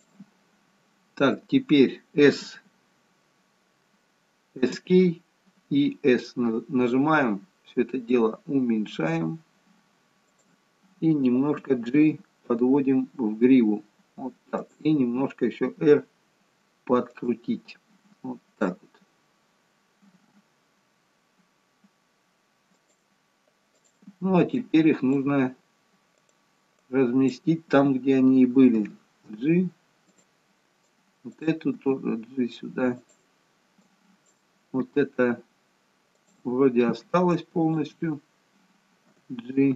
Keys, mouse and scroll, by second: 6.8 s, 12.0 g, 15.8 r, 20.2 g, 23.9 click, 24.6 click, 27.0 click, 28.9 g, 31.0 click, 31.8 g, 33.9 click, 37.7 shift+click, 39.2 g.